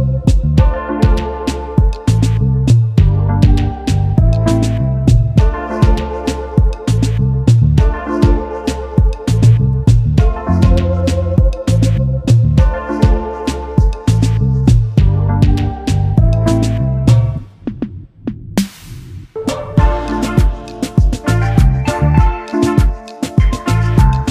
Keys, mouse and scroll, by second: 1.0 ctrl+z, 2.6 right click, 3.7 ctrl+z, 4.8 ctrl+z, 7.3 right click, 9.0 right click, 10.0 ctrl+z, 14.1 ctrl+z, 16.4 ctrl+z, 17.4 right click, 18.8 ctrl+z, 19.8 ctrl+z, 22.4 ctrl+z.